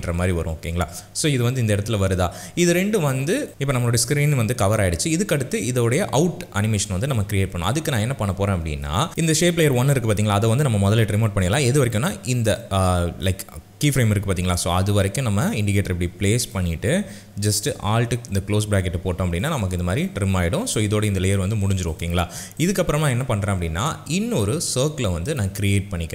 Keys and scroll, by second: 11.5 u, 18.3 alt+].